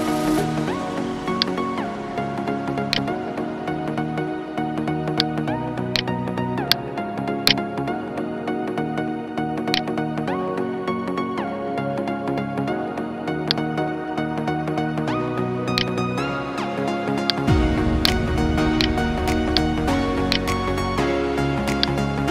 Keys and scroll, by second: 0.1 ctrl+t, 12.0 ctrl+t.